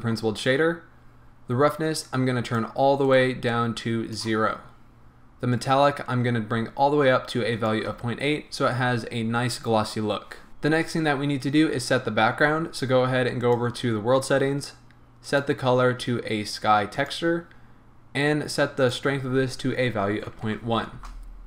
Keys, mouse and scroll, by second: 0.5-1.7 scroll up 1, 2.4 click, 3.1 right click, 3.5-10.5 drag, 13.4 click, 15.2-21.4 drag, 21.1 Return.